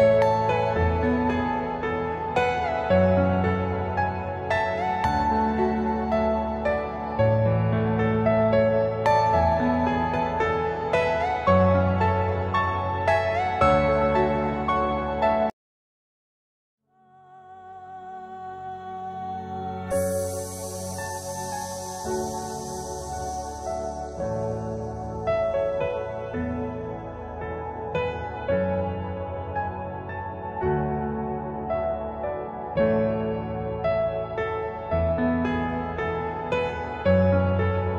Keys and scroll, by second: 0.4 ctrl+g, 2.1 c, 7.5 Escape, 10.3 alt+c, 12.0 F4, 13.4 Escape, 13.5 F2, 18.9 F4, 19.6 Escape, 24.4 ctrl+r, 27.3 shift+F2, 28.6 Escape, 35.9 Delete, 37.2 shift+F2.